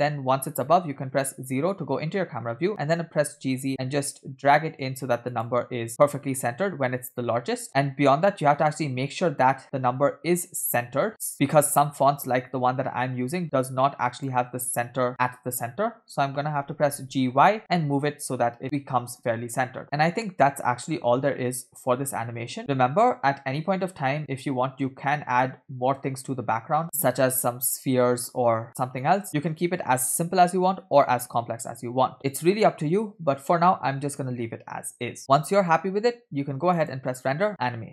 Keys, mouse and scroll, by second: 1.1 KP_0, 2.7 g, 6.3 space, 7.6 space, 9.1-14.9 drag, 16.8 g, 19.8 space, 22.8 space, 24.9-26.8 drag, 36.7-37.9 drag.